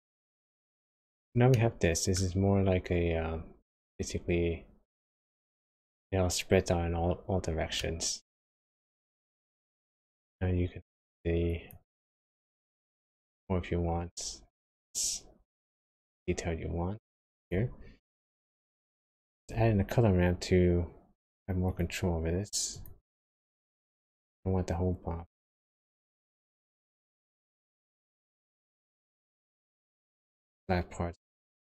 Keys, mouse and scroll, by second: 1.5 middle click, 7.7 middle click, 8.6-8.9 scroll up 1, 8.9-9.3 scroll down 1, 9.3 middle click, 11.5 click, 12.0 click, 18.6 middle click, 19.3 shift+a, 23.4 click, 26.0 click.